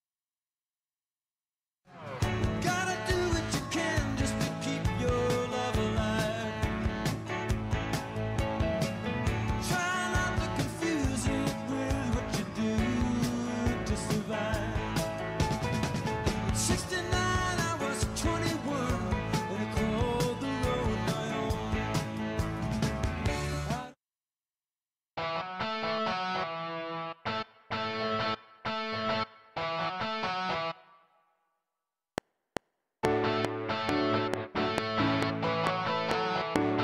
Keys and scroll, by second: 1.8 space, 22.1 ctrl+Delete, 23.6 space, 32.0 F7.